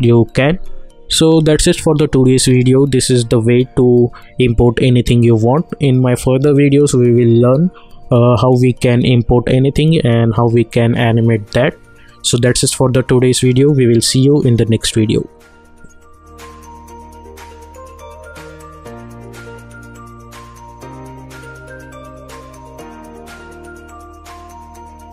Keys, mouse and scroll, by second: 1.2 click.